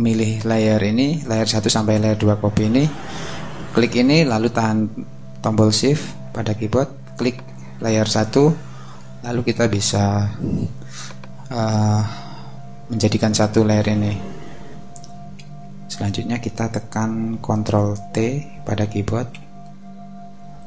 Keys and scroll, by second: 19.5 super+t.